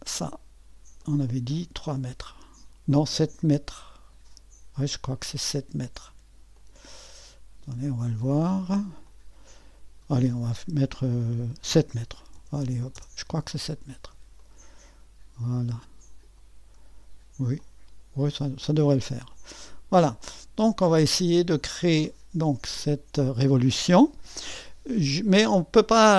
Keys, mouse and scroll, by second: 6.5-9.2 drag, 11.4-12.9 typing, 14.4-16.8 drag, 16.8 typing, 17.6-21.6 drag, 22.7 click.